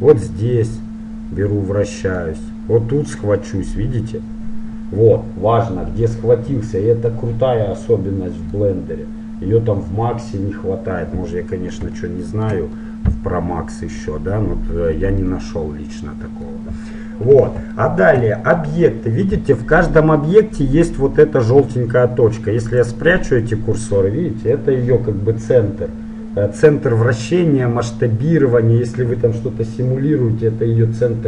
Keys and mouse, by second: 3.2 middle click, 4.0-5.0 middle drag, 8.7-14.8 middle drag, 16.9-22.4 middle drag, 19.8-21.6 right drag, 22.9-24.6 drag, 28.3-31.2 middle drag.